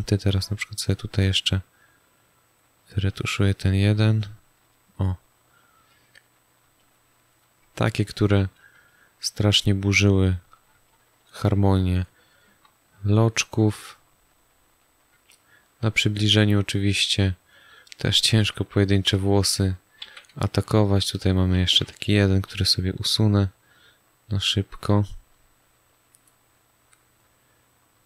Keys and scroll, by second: 6.5 space, 8.7 space, 10.7 space, 12.6 space, 15.1 space, 17.6 space, 20.0 z, 20.6 space, 22.1 j.